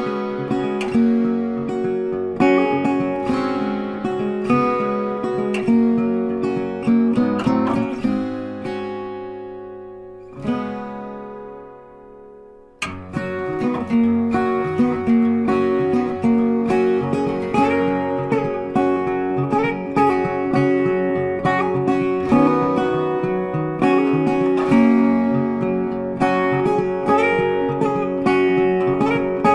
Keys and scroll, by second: 2.8 ctrl+t, 16.9 ctrl+t, 24.3-24.7 typing.